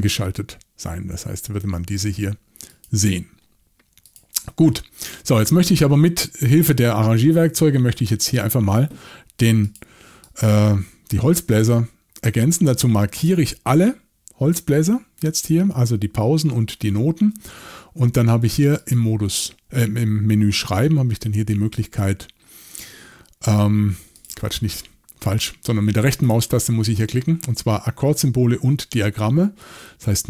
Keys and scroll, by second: 7.4 shift+y.